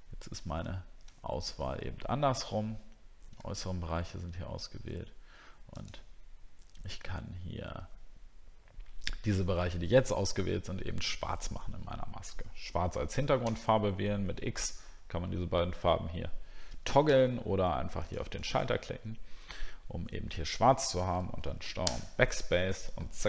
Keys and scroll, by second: 1.1 alt+scroll down 1, 3.5 alt+scroll up 1.